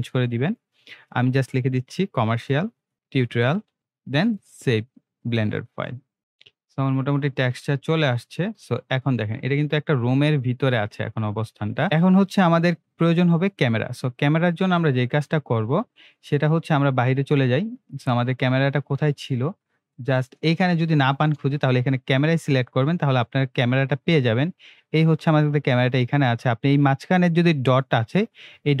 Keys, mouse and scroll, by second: 2.0-4.2 typing, 4.3 click, 6.2-6.9 scroll up 3, 8.7-9.2 scroll down 1, 9.5 scroll up 1, 10.9-11.3 shift+middle click, 11.8 scroll up 1, 14.6 click, 16.0 scroll up 1, 16.4 scroll down 1, 17.0 scroll down 1, 18.2 click, 19.4-20.0 shift+middle drag, 21.6 click, 23.1 scroll down 1, 23.6 scroll up 1, 24.6 scroll up 1, 26.8-28.8 drag.